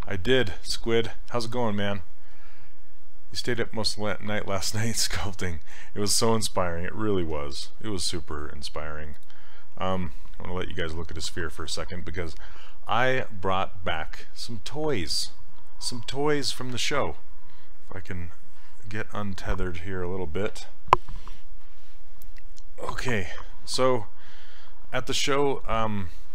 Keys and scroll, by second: 7.4 d.